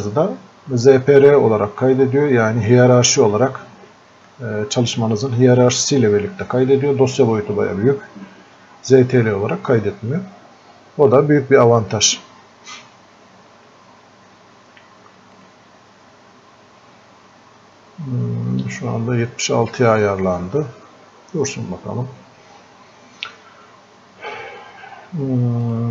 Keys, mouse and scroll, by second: 15.4 click, 25.7 click.